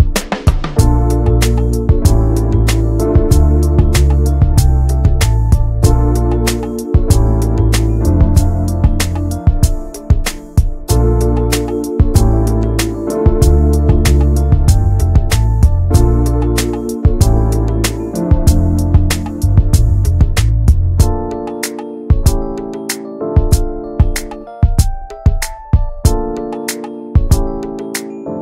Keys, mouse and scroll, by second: 0.1 middle click, 0.7 click, 1.2 alt+shift+click, 1.7-2.9 middle drag, 2.9 alt+shift+click, 3.1 middle click, 4.0-4.5 scroll up 2, 4.2 shift+middle click, 5.4 shift+middle click, 6.3 right click, 6.5 a, 7.2 right click, 7.9 scroll down 2, 8.3 middle click, 8.9 click, 9.0 scroll down 1, 9.2 middle click, 9.7 Tab, 10.0 middle click, 10.4 Tab, 10.7 middle click, 10.9 Tab, 11.1 scroll down 1, 11.3 middle click, 11.5 ctrl+s, 11.8 click, 12.1 /, 12.5 middle click, 12.9 click, 13.1 scroll down 1, 13.3 middle click, 13.6 ctrl+s, 13.8 shift+middle click, 14.0 scroll up 1, 14.3 ctrl+s, 14.5 click, 14.8 middle click, 15.5 /, 15.8 middle click, 16.3 Tab, 17.0 alt+middle click, 17.3 alt+z, 17.5-18.3 scroll down 1, 18.6 click, 19.2 alt+z, 19.5 alt+z, 20.7 ctrl+click, 21.0-22.1 middle drag, 22.1 3, 22.9 middle click, 23.2 alt+z, 23.4-24.9 middle drag, 24.9 x, 25.1 middle click, 25.9 scroll up 1, 26.4 Tab, 26.4 click, 26.9 ctrl+a, 27.3 middle click, 27.5 Tab, 27.8 middle click, 28.0 scroll up 1, 28.1 shift+middle click.